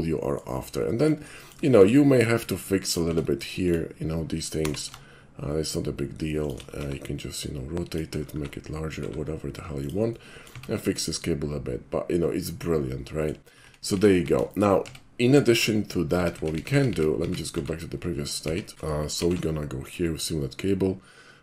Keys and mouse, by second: 0.8 ctrl+middle click, 1.4 shift+middle click, 1.6 shift+middle click, 2.8 shift+click, 3.1 Tab, 3.7 click, 4.6 g, 6.4 shift+click, 6.8 r, 7.8 click, 8.4 s, 9.8 click, 10.1 middle click, 10.5 Tab, 11.1-13.3 middle drag, 13.6 ctrl+z, 14.5 shift+middle click, 14.8 Tab, 15.4 shift+middle drag, 16.2 ctrl+z, 18.7 ctrl+shift+z, 19.2 alt+shift+c, 19.8 click.